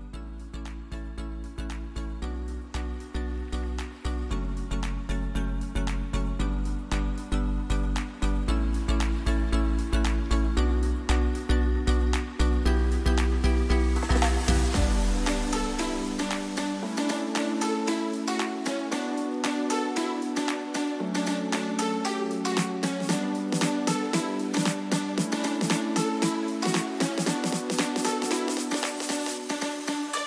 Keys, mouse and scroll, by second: 7.4 click, 8.4 ctrl+t, 9.3-12.7 drag, 14.9 ctrl+t, 15.9-17.8 drag, 20.0-21.0 scroll down 3, 23.1-24.4 alt+drag, 24.4 t, 24.8 click, 26.0-26.9 typing, 28.2-30.2 drag.